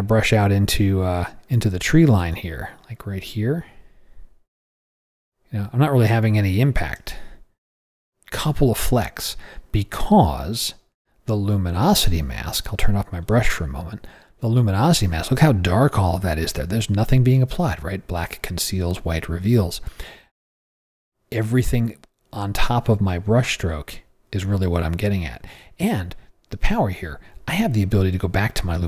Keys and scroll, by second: 0.6 [.